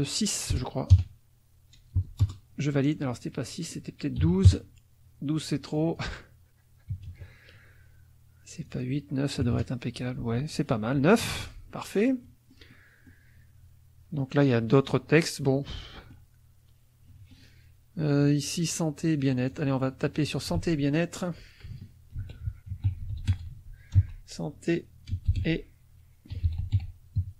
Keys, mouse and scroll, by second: 0.5 BackSpace, 0.9 KP_Add, 1.9 BackSpace, 2.2 Return, 3.5 click, 4.2 KP_2, 4.5 KP_Enter, 5.7 click, 6.9 KP_8, 7.1 KP_Enter, 8.6 click, 9.4 KP_9, 11.3 F1, 11.4-12.6 drag, 11.9 middle click, 12.6 middle click, 14.6 middle click, 15.4 middle click, 17.1 middle click, 19.4 click, 20.3 ctrl+click, 20.5 ctrl+a, 22.1-24.0 typing, 25.1-27.3 typing.